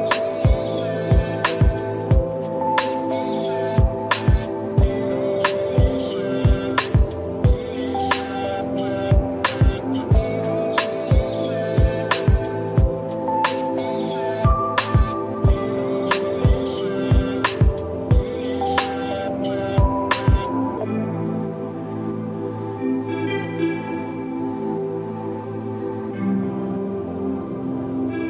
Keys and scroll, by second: 4.8 space, 9.2 ctrl+-, 10.1 space, 11.3 ctrl+=, 12.5 ctrl+-, 12.9 ctrl+=, 13.6 ctrl+-, 14.3 ctrl+=, 17.1 alt+z, 18.0 ctrl+alt+z, 27.8 ctrl+-.